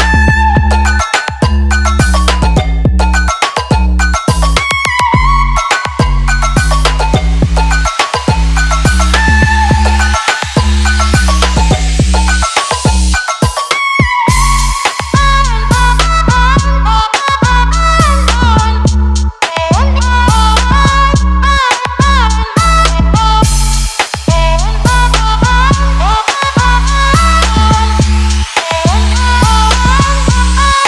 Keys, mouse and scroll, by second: 6.0-8.7 shift+drag, 10.0-25.4 drag, 30.2-30.8 alt+shift+drag.